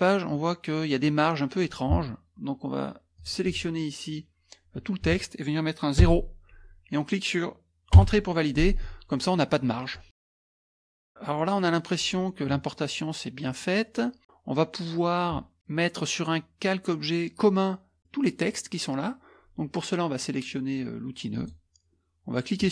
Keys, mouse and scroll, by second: 3.1 click, 6.0 KP_0, 8.0 Return, 9.9 middle click, 9.9 scroll, 11.4-12.0 scroll up 1, 12.5 scroll up 1, 12.7 middle click, 13.6 middle click, 13.9 middle click, 18.0 middle click, 21.3 click, 22.6 click.